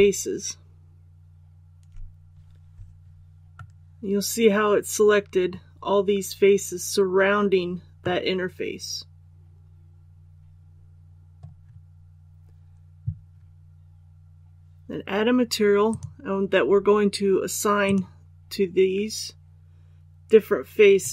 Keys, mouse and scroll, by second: 3.5-11.3 middle drag, 15.8 click.